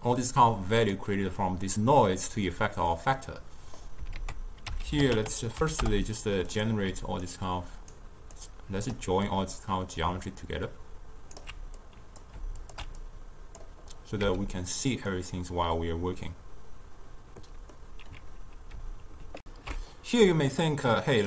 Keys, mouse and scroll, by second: 0.3 click, 3.3 middle click, 4.2 ctrl+a, 7.3-11.9 alt+right drag, 11.9 click, 12.7 alt+shift+click, 13.1-14.3 drag, 14.3 z, 17.6-19.4 middle drag, 19.4 ctrl+alt+shift+q.